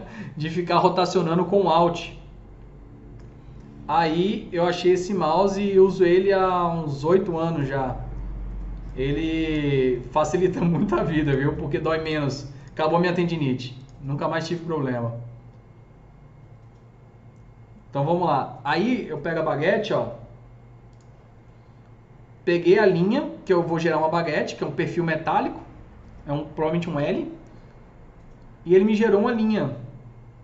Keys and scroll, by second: 26.7 alt+q.